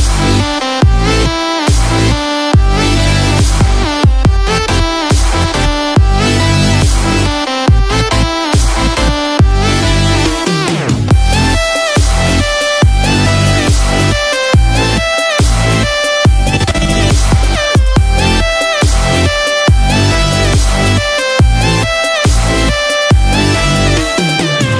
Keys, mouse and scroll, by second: 3.8 shift+z, 4.8 shift+z, 19.5-19.9 scroll down 2, 20.5 Tab, 21.3 right click.